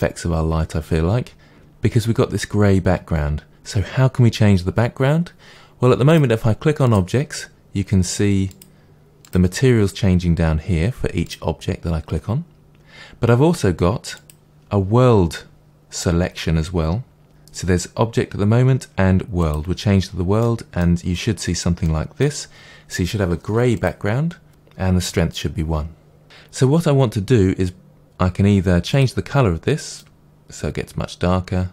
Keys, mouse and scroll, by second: 6.0 click, 6.8 click, 8.4 click, 9.2 click, 11.2 click, 14.1-20.3 drag, 20.3-23.7 middle drag, 21.0-21.8 scroll up 2, 23.7 click, 26.2 ctrl+s, 28.9 click, 30.0 click.